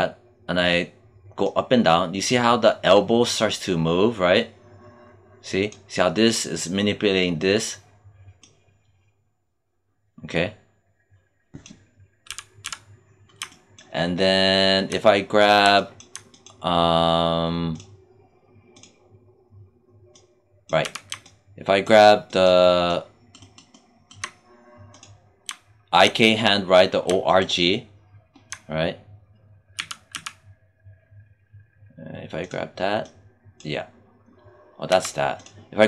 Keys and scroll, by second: 12.2 z, 20.7 z, 29.6 z, 34.8 z.